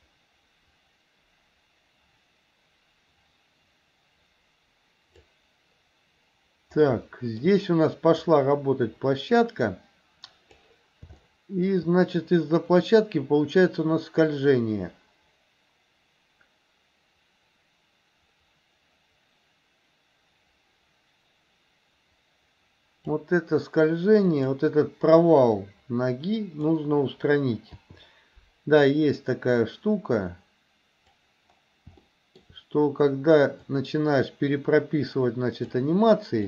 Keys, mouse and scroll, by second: 7.1-7.4 shift+middle drag, 8.4-10.7 drag, 11.2 shift+middle click, 12.9-23.2 drag, 24.3 click, 25.6-26.9 drag, 27.8 i, 29.0-31.3 drag, 32.0 shift+middle click, 33.8-35.8 drag.